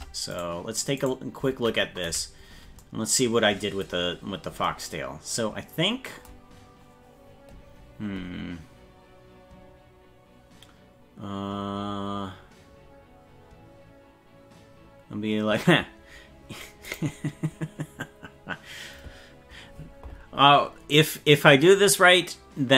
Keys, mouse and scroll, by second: 0.4 right click, 1.2 right click, 2.0 KP_Decimal, 4.2 scroll up 3.